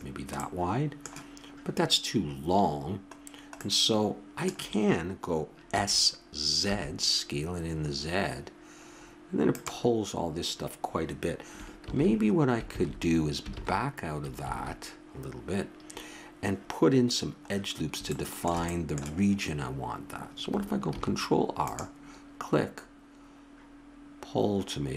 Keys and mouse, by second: 2.4 middle click, 5.7 s, 11.8 ctrl+z, 12.7 ctrl+z, 13.5 ctrl+z, 14.4 ctrl+z, 17.5-20.6 middle drag, 20.9 ctrl+r.